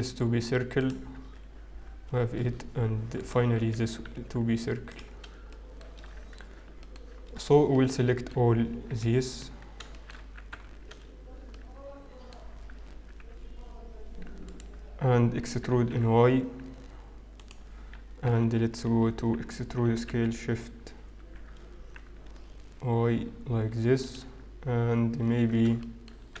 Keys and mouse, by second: 3.1-4.6 right drag, 3.4 w, 8.8 KP_7, 10.1 z, 10.8 a, 11.6 middle click, 12.8 z, 14.4-15.6 right drag, 15.6 e, 18.2 KP_1, 19.6 e, 24.1 z, 25.3 middle click, 26.2 z.